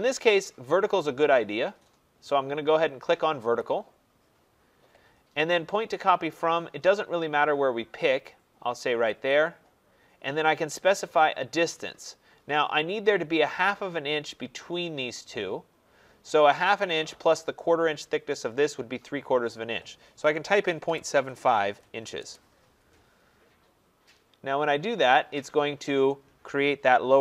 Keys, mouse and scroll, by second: 3.5 click, 9.2 click, 14.3 click, 20.1-22.3 typing.